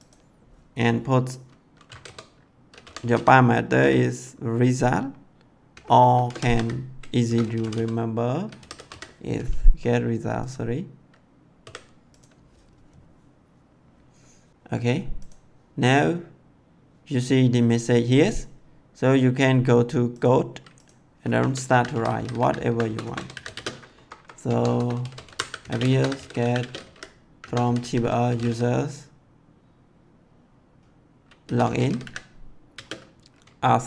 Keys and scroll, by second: 1.8-3.7 typing, 5.7-8.9 typing, 11.6 s, 21.3 Caps_Lock, 21.6-23.5 typing, 22.6 Return, 23.9 Up, 24.4 Tab, 24.7 Return, 24.9-28.4 typing, 27.4 Caps_Lock, 31.4-32.7 typing.